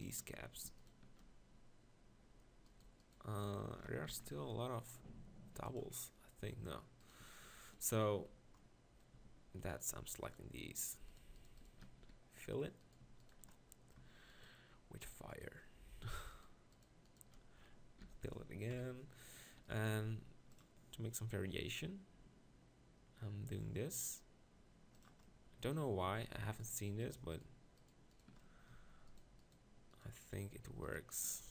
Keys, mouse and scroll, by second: 4.1 ctrl+l, 10.5 right click, 12.0 f, 18.0 f, 18.7 KP_1, 19.9 ctrl+r.